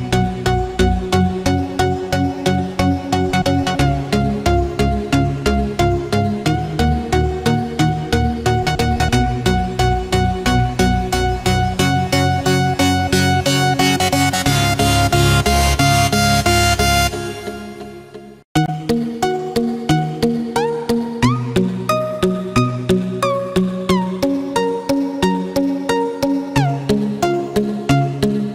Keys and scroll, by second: 4.5 ctrl+=, 4.7 ctrl+space, 13.6 ctrl+-, 15.8 ctrl+=.